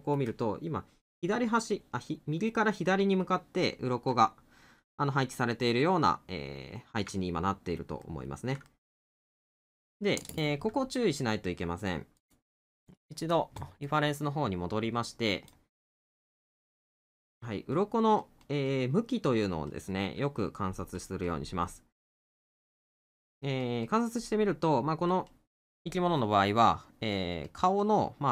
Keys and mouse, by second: 5.8 middle click, 7.2 middle click.